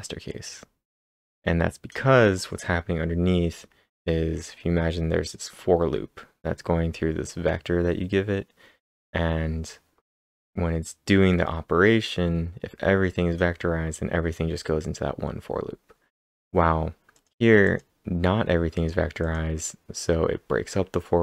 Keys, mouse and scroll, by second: 17.1 click, 17.7-18.8 drag, 18.8 click, 19.2 click.